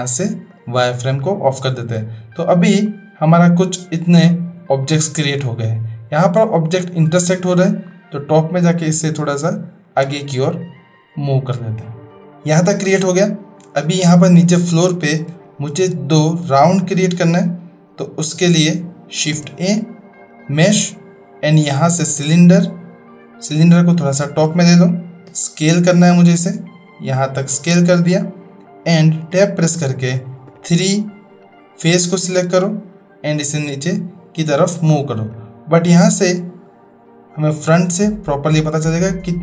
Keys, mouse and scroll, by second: 3.4-4.7 middle drag, 8.7-10.9 drag, 12.7-13.7 middle drag, 14.7-15.2 shift+middle drag, 15.9-16.2 shift+middle drag, 19.2 shift+a, 23.5-24.3 drag, 25.2 s, 29.3 Tab, 30.5 3, 31.4 click, 32.4-33.4 drag, 37.5-39.4 drag.